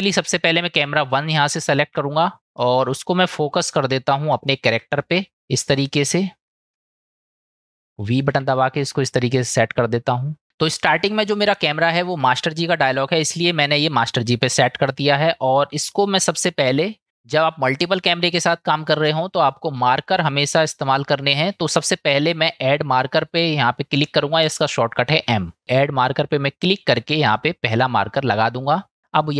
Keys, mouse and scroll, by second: 1.1 click, 2.6-3.7 middle drag, 4.5 shift+middle drag, 5.3-6.8 middle drag, 6.8 ctrl+alt+KP_0, 8.3 v, 9.3 click, 15.9 click, 20.1-26.1 drag.